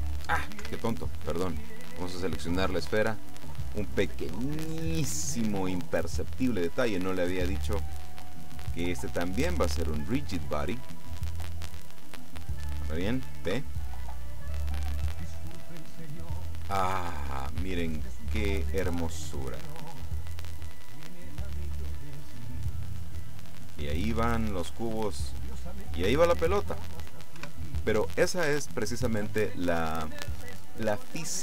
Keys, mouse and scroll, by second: 0.7 Escape, 1.5 right click, 4.4-5.9 middle drag, 6.8 click, 8.5 click, 11.0 click, 13.6 p, 27.4 Escape.